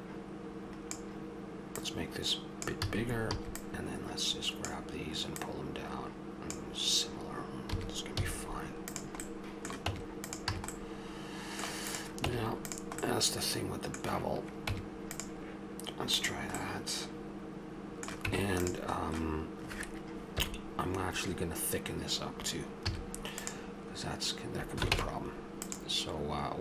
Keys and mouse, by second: 1.8-4.2 drag, 2.9 a, 5.3-7.7 drag, 7.7 a, 8.2 z, 9.3 middle click, 9.9 Tab, 10.5 a, 11.9 click, 12.2 Tab, 14.7 Tab, 16.8 middle click, 18.2 Tab, 20.4 KP_1, 22.9 z, 24.9 ctrl+Tab.